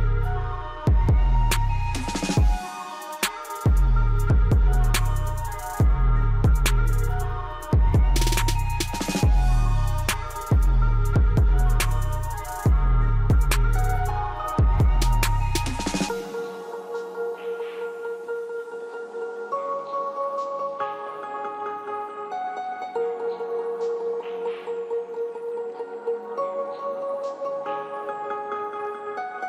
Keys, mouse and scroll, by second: 3.3 ctrl+Page_Down, 5.7 click, 8.2 ctrl+Page_Down, 10.9-16.9 drag, 14.5 typing, 16.9 right click, 18.0 click, 20.7-21.0 scroll up 1, 21.3 typing, 22.8 click, 23.3-23.7 scroll up 1, 25.3-26.9 ctrl+shift+drag, 27.5-27.8 scroll up 1.